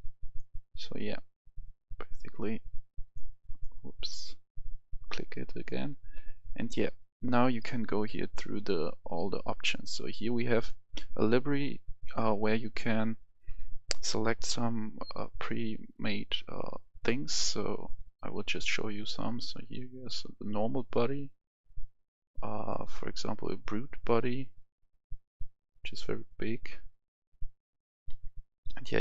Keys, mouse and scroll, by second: 4.5 right click, 6.6 click, 7.2-10.5 scroll up 1, 10.5 click, 19.5-25.5 drag, 28.1-28.5 scroll down 1, 28.5 scroll up 1, 28.7-29.0 scroll down 1.